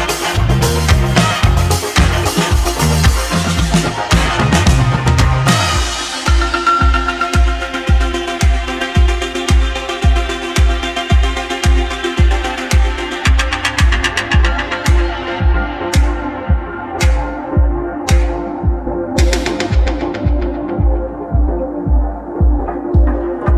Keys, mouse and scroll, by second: 0.4 ctrl+a, 0.8 click, 1.5 Tab, 2.0 click, 3.6 i, 5.3-7.6 middle drag, 7.6 e, 9.7 middle click, 10.5-11.1 scroll down 1, 11.1 click, 11.3-11.9 scroll down 2, 11.9-14.9 middle drag, 14.9-16.0 scroll down 1, 16.0-18.5 middle drag.